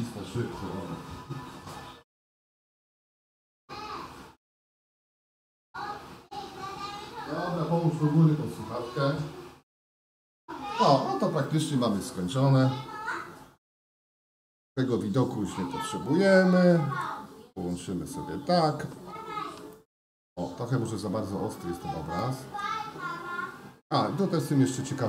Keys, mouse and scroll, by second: 14.5-18.0 right drag, 19.7 shift+middle click, 22.2 shift+middle click, 24.7-25.0 middle drag.